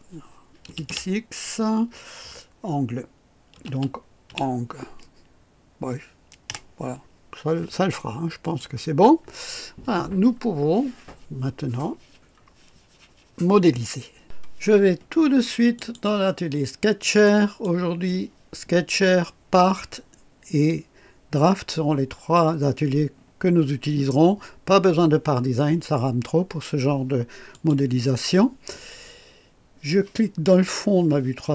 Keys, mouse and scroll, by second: 0.6 typing, 3.2-4.7 typing, 6.4 typing, 8.4 click, 15.7 click, 17.2 click, 27.5 click.